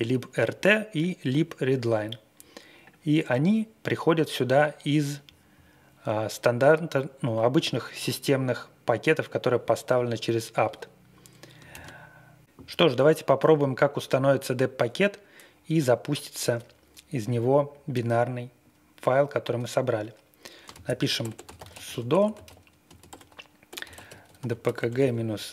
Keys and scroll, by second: 11.7 ctrl+d, 20.4-25.5 typing.